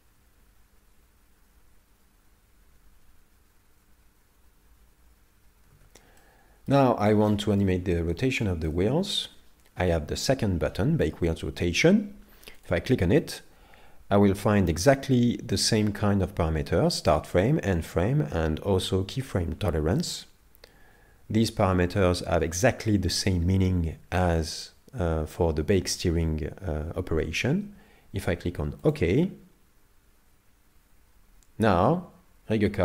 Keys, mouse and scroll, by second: 6.2 middle click, 7.0-7.5 scroll down 2, 7.3 middle click, 7.9 scroll up 1, 8.4 shift+middle click, 8.4 scroll up 4, 12.6 click.